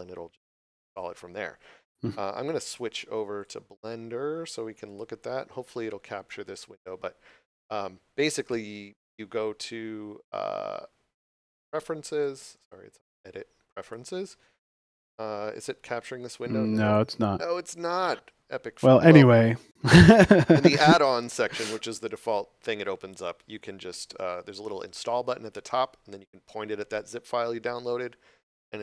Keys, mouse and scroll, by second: 3.4 click, 12.1 click.